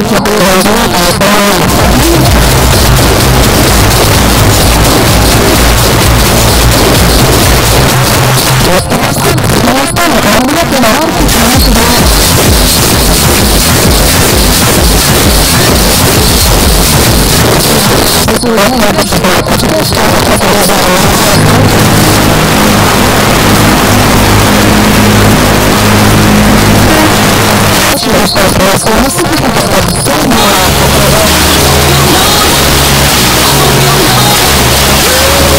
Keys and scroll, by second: 7.9 Page_Down, 17.5 Page_Down, 27.1 Page_Down.